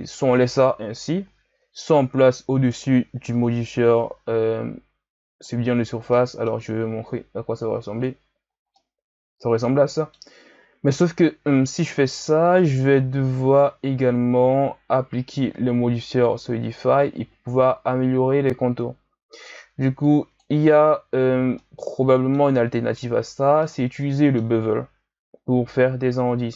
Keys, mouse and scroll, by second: 0.7 KP_1, 2.0-5.0 drag, 6.1-7.6 middle drag, 7.6-8.0 drag, 8.8-11.7 middle drag, 12.0-15.0 drag, 20.0-20.4 drag, 21.5-26.5 middle drag.